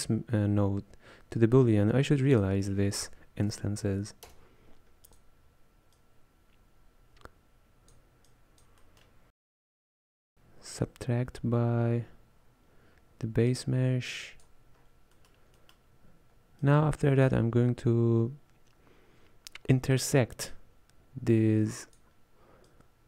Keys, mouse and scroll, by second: 6.0 click, 8.3 click, 8.9-12.1 middle drag, 13.6-14.9 drag, 14.9-15.3 scroll down 1, 15.3-16.7 middle drag, 16.7 click, 20.5-23.0 drag.